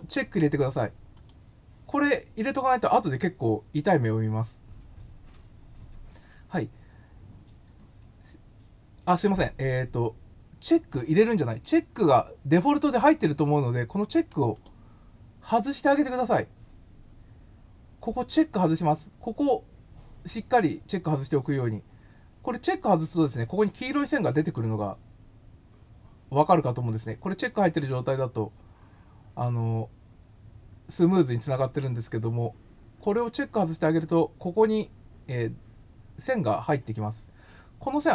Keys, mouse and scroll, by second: 1.1 click, 14.5 click, 24.4 click, 33.0 click.